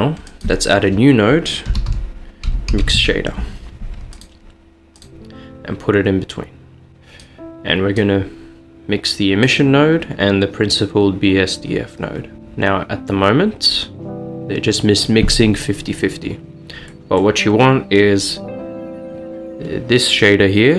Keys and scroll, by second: 1.7-3.0 typing.